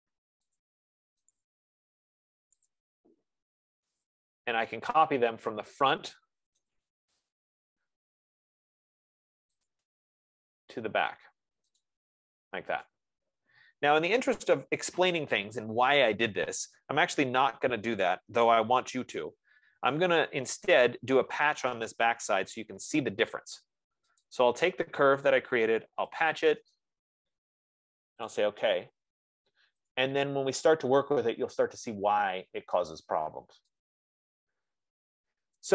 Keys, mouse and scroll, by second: 0.9 click, 1.7 shift+click, 3.0 shift+click, 4.3 shift+click, 6.8-7.9 typing, 9.3 typing, 10.2 click, 12.3 click, 14.8 right click, 19.4 ctrl+z, 21.3 Escape, 22.8 ctrl+z, 24.6 click, 25.9-27.3 typing, 28.8 click, 30.3 click, 30.4-31.2 typing, 35.4 click.